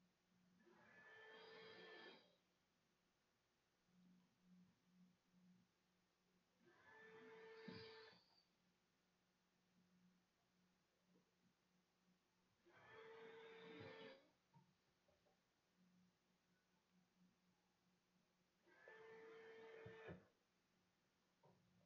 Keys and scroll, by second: 0.7 a.